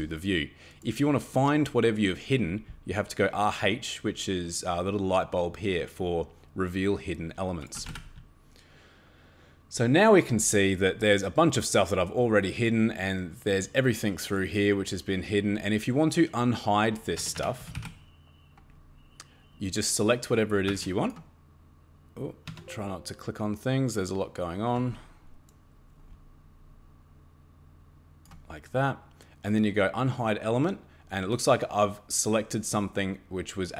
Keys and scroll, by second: 7.5-8.4 typing, 17.2 Escape, 17.3 Escape, 17.4-18.2 typing, 20.7 Escape, 22.5 Tab.